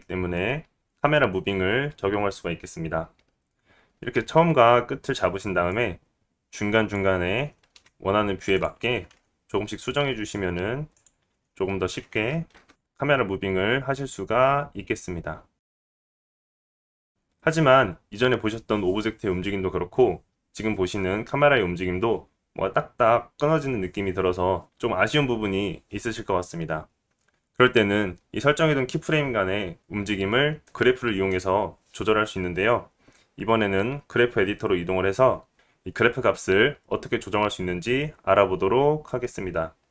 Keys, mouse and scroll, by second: 5.1 space, 6.9 click, 8.6 g, 9.8 right click, 9.9-11.2 drag, 9.9 r, 11.2-39.1 right drag, 11.2 g, 13.7 i, 14.9 i, 17.1-39.1 drag, 17.1-39.1 middle drag, 39.4 click, 39.4 middle click, 39.4 right click.